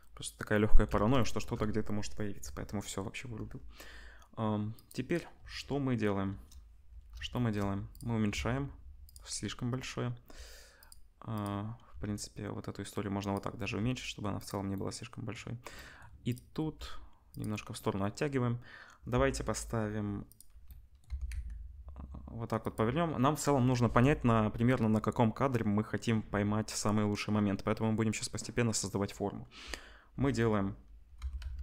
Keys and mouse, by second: 4.8-7.9 middle drag, 6.3 KP_0, 7.9-9.1 drag, 8.3 s, 9.1-10.8 middle drag, 10.8 click, 10.8 middle click, 11.3 click, 11.4-14.9 middle drag, 11.9 s, 13.6 g, 16.2 click, 16.6 g, 20.2 click, 21.0 r, 29.3-31.2 middle drag, 31.2 r.